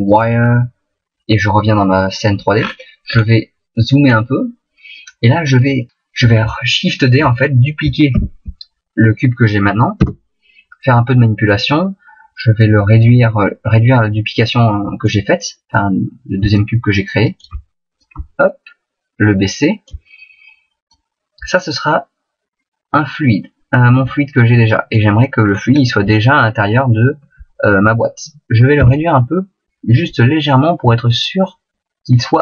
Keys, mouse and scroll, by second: 0.9 click, 2.5-4.1 scroll up 9, 4.1-5.9 scroll up 1, 8.1 shift+d, 13.0 click, 16.5 shift+click, 17.9 click, 20.9 click, 25.5-26.0 scroll up 1, 26.2 shift+middle click, 28.7 s, 32.3 shift+click.